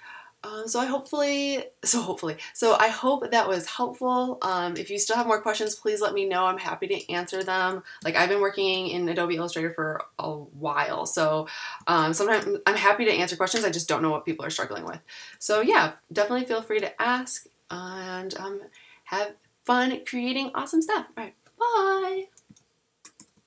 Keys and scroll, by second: 8.0 super+-, 15.5 super+-.